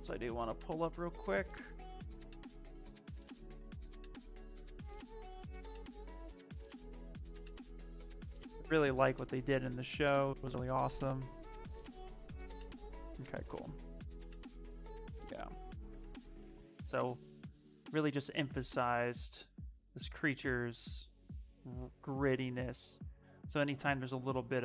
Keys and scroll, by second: 15.5 s, 24.0 s.